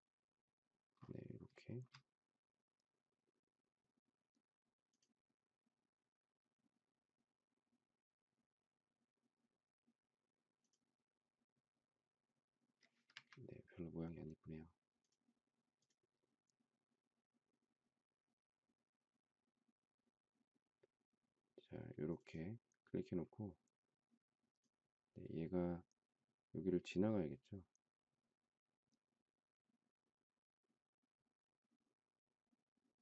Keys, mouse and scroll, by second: 13.1 Escape.